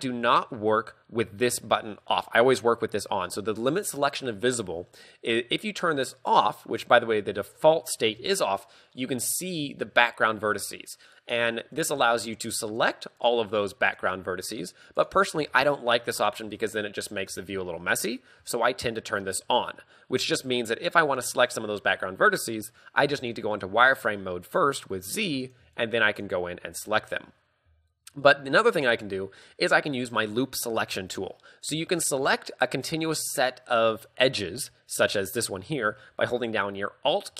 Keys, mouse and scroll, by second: 0.0 middle click, 0.2 z, 6.2 click, 7.5 shift+middle click, 9.6 a, 11.9 right click, 12.4 shift+right click, 12.8 right click, 13.3 shift+right click, 14.0 shift+right click, 14.7 shift+right click, 15.1 shift+right click, 15.5 a, 19.4 click, 21.1-22.6 scroll down 1, 23.1 z, 25.4 right click, 25.8 shift+right click, 26.2 right click, 26.7 a, 26.9 z, 28.0 shift+middle click.